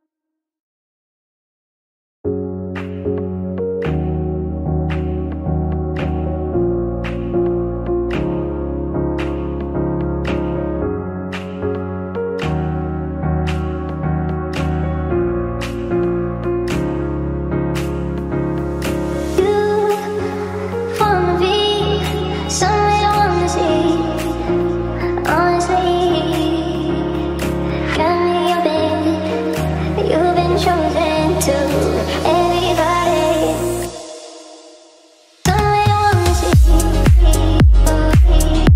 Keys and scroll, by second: 0.7 w, 1.1 d, 4.5 f, 5.5 w, 5.9 d, 9.2 f, 10.2 w, 33.3 w, 35.1 w.